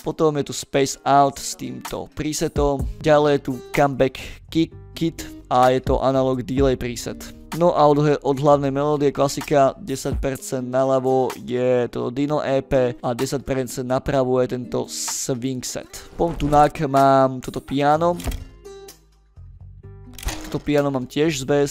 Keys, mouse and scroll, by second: 0.3 click, 3.6 click, 7.1 click, 7.6 click, 13.0 click, 16.4 scroll up 1, 16.7 middle click, 17.9 click.